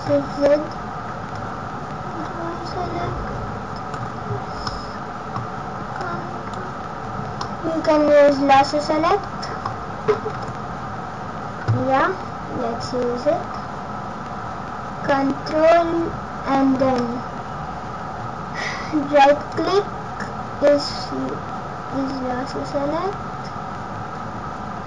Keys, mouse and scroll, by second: 0.0 shift+z, 1.3 ctrl+click, 4.4-4.7 scroll up 2, 4.6 middle click, 5.9 ctrl+click, 7.4 middle click, 10.3 shift+z, 19.4 ctrl+right click.